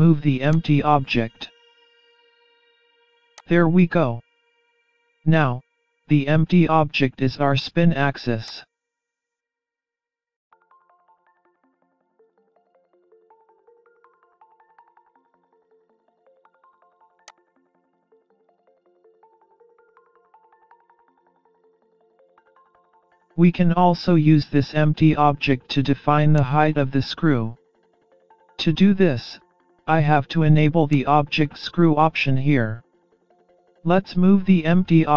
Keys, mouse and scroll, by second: 0.6 click, 2.0-2.8 scroll down 4, 3.4 click, 4.8 middle click, 6.2 scroll down 4, 6.6-7.1 scroll up 3, 7.1 middle click, 8.5 click, 9.8 middle click, 11.1 scroll down 5, 11.7 middle click, 15.4 middle click, 17.3 click, 19.8 middle click, 21.2-22.3 scroll up 5, 22.2 middle click, 23.5 middle click, 26.4 click, 31.0 click, 32.0 middle click, 32.8 scroll down 4, 33.4 scroll up 4, 33.8 middle click.